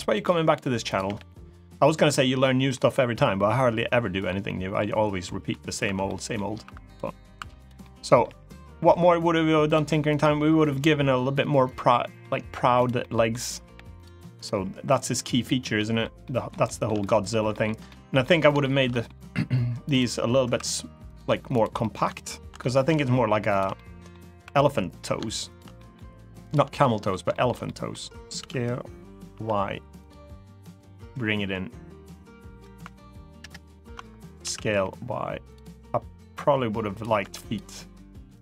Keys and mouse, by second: 0.8 g, 1.6 click, 1.8 middle click, 3.6 middle click, 4.2 middle click, 5.0 middle click, 5.6 3, 5.8 middle click, 6.4 3, 6.7 click, 7.1 2, 7.3 click, 7.5 middle click, 8.0 g, 9.4 click, 9.8 click, 10.3 g, 11.4 click, 11.6 middle click, 12.7 middle click, 13.7 click, 13.7 g, 14.3 g, 14.6 click, 14.9 middle click, 15.5 middle click, 16.0 shift+middle click, 16.7 middle click, 17.2 shift+middle click, 17.6 middle click, 18.3 shift+middle click, 18.6 middle click, 19.6 click, 20.2 3, 20.9 click, 20.9 2, 21.5 middle click, 22.3 middle click, 23.5 middle click, 24.2 3, 25.3 shift+click, 25.5 middle click, 26.5 middle click, 27.0 shift+middle click, 27.4 middle click, 28.1 s, 29.0 y, 29.7 click, 30.7-32.3 drag, 33.1 ctrl+KP_Add, 34.2 s, 34.5 y, 35.2 click, 35.8 click, 36.9 2, 37.2 click, 38.1-38.4 drag.